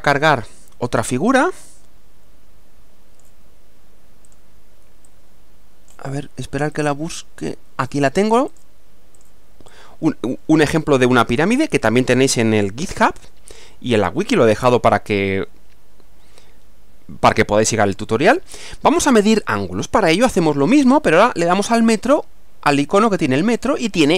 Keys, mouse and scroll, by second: 0.9-3.4 drag, 4.3 click, 5.1 click, 6.7-8.0 drag, 8.5 click, 9.2 click, 9.7-10.9 drag, 17.3-20.0 middle drag.